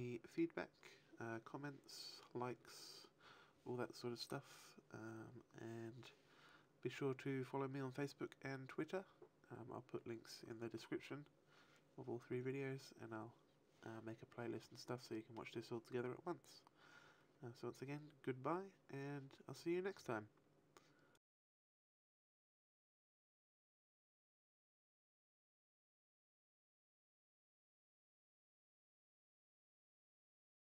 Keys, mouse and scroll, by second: 15.0 middle click.